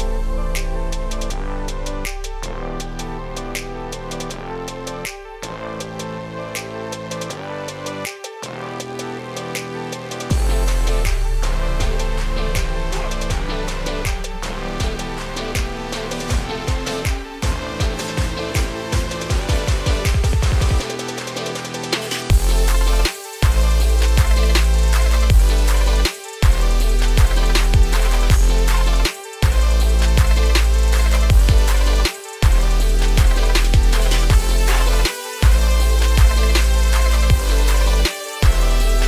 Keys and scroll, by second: 3.9 ctrl+space, 24.9 ctrl+space.